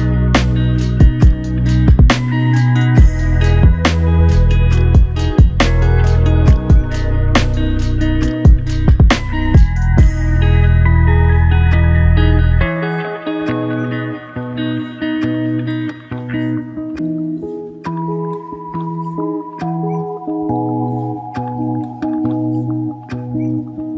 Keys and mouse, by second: 4.3 double click, 14.9 double click.